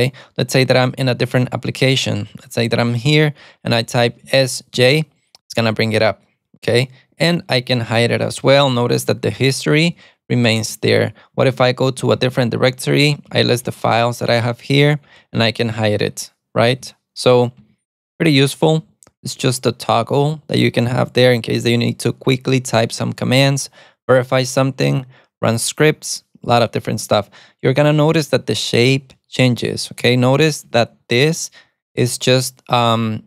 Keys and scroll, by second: 4.9 alt+super+a, 8.1 alt+super+a, 9.0 alt+super+a, 10.1 alt+super+a, 10.6 alt+super+a, 11.2-13.9 typing, 17.0 alt+super+a, 18.4 alt+super+a, 19.0 alt+super+a, 19.1 alt+super+d, 30.8 alt+super+a, 30.9 alt+super+c.